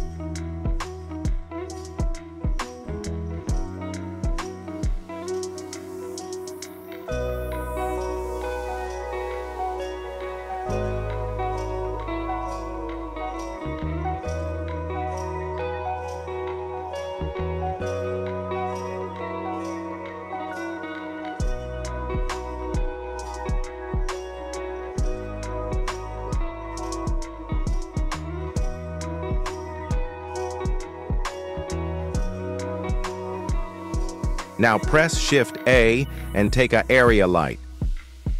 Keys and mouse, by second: 0.1 g, 1.5 z, 1.5 z, 1.8 g, 3.1 x, 3.1 x, 3.2 x, 3.4 middle drag, 4.2-4.6 shift+middle drag, 5.7 middle drag, 6.1 shift+middle drag, 6.8 g, 10.0 shift+middle drag, 10.5 g, 12.3 y, 12.4 y, 13.2 shift+middle click, 16.6 middle click, 16.9 g, 19.7 z, 19.8 z, 19.8 z, 20.0 middle click, 20.4 g, 23.8 click, 24.9-26.7 shift+drag, 27.3 g, 31.8 shift+middle drag, 35.2 shift+a.